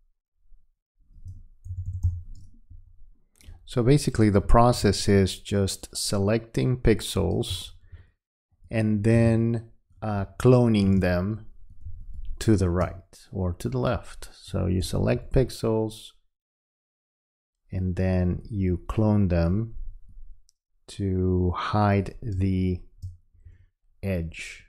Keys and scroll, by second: 1.7 [, 7.5 space, 11.0 space, 22.4 space.